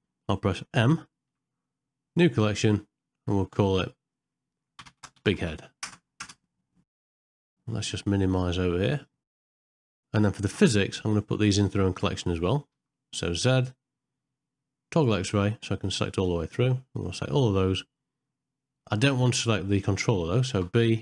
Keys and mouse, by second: 8.9 click, 10.7-12.0 shift+middle drag, 12.7 z, 16.2-17.9 drag, 19.0-20.1 middle drag.